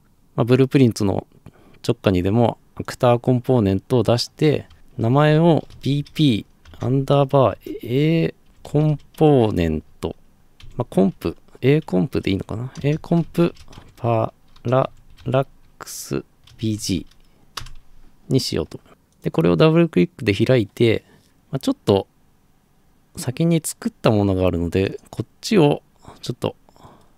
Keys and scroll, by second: 5.5-10.6 typing, 13.5-17.0 typing, 17.6 Return.